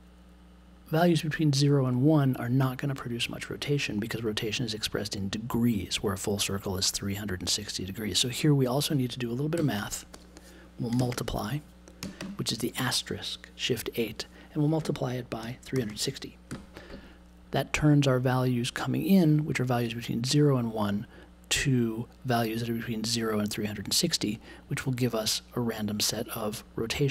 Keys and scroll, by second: 9.5 n, 10.9 shift+9, 12.0 BackSpace, 12.1 space, 15.4 3, 16.5 ..